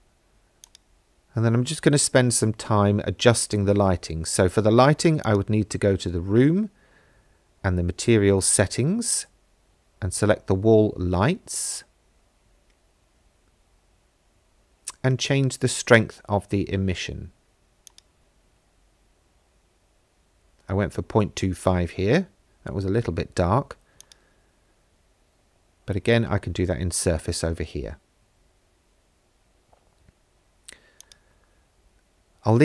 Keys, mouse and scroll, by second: 0.6 click, 5.2 click, 9.1 click, 17.9-19.7 drag, 24.0 click, 31.0 click.